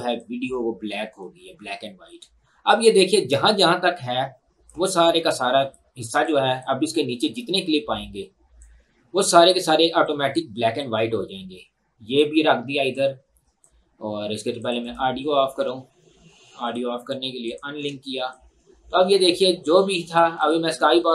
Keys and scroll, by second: 17.8 Delete.